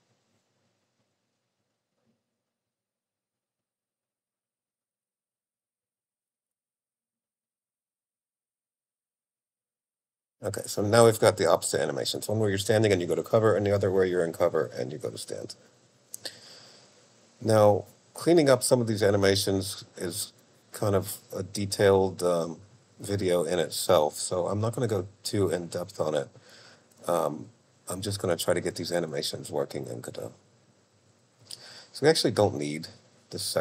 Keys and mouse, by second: 1.7 click, 5.0 click, 32.6 click.